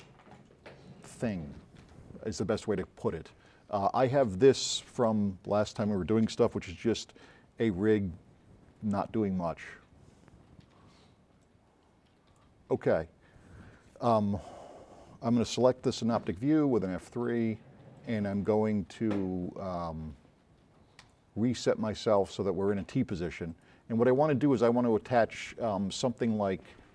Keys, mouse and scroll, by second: 6.5 click, 11.5 click, 17.0 F3, 18.0-18.5 drag, 21.1 click.